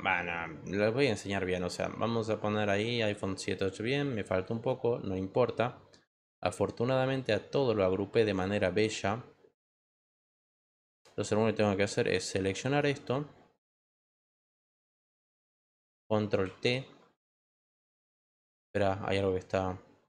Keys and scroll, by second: 16.4 ctrl+t.